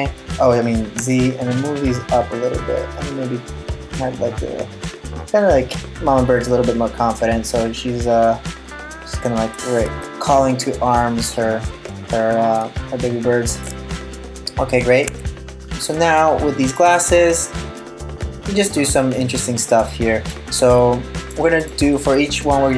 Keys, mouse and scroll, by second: 9.6 middle click, 14.7 Tab, 15.4 middle click, 16.9 right click, 17.4 middle click, 20.4 middle click, 21.2 middle click, 21.6 right click, 22.0 middle click.